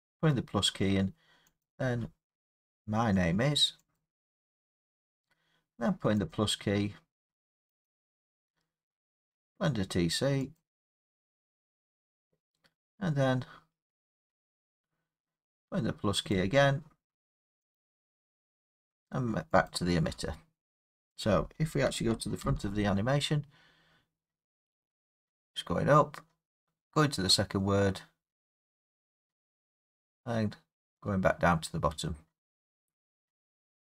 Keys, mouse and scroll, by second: 1.6 click, 3.9 click, 7.8 click, 10.5 click, 13.8-15.5 scroll, 16.3 click, 17.7 click, 22.4 Left.